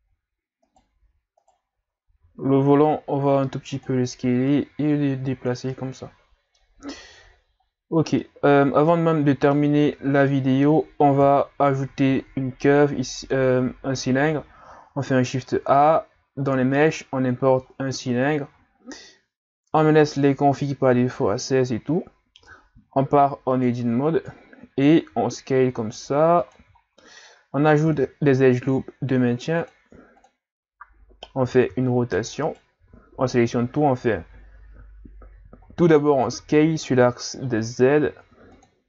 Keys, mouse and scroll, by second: 0.1-0.7 scroll up 2, 0.7 right click, 1.4 shift+right click, 2.1 s, 4.5-5.7 drag, 5.7-8.0 middle drag, 8.0 scroll down 1, 8.2-9.9 middle drag, 9.9 a, 10.3-11.2 middle drag, 11.2 KP_3, 12.1 shift+a, 17.7-18.3 scroll down 3, 18.3-19.4 scroll up 1, 19.4-21.3 scroll up 1, 22.3 Tab, 22.8-24.3 scroll up 5, 24.3 click, 25.1 s, 26.8-27.2 scroll down 3, 27.2 scroll up 2, 27.9 ctrl+r, 31.4 r, 32.8 a, 33.1 a, 35.7-36.2 scroll down 1, 36.2 s.